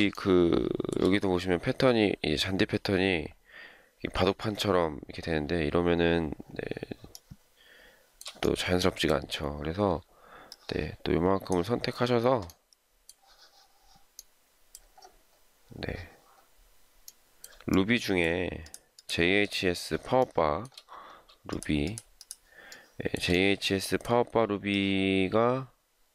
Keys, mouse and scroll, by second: 0.1 shift+middle click, 7.1 shift+middle click, 17.7 shift+middle click, 18.9 shift+click, 19.0 shift+double click, 19.4 shift+click, 20.2 shift+middle click, 21.5 shift+click, 21.8 shift+click, 22.7 shift+middle click, 24.7 shift+click.